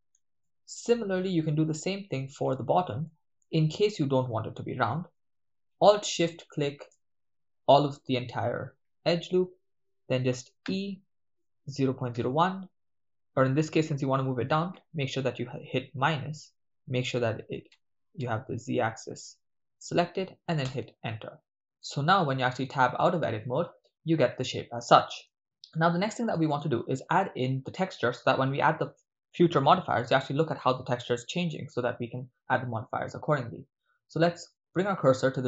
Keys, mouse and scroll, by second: 0.5-2.3 shift+middle drag, 3.0 shift+middle click, 6.3 alt+shift+right click, 11.2-12.4 typing, 15.0 -, 17.8 z, 18.6 z, 20.6 Return, 21.9-22.4 middle drag, 22.7 Tab, 23.2-24.3 ctrl+middle drag, 24.9-25.4 middle drag, 25.7-26.1 ctrl+middle drag.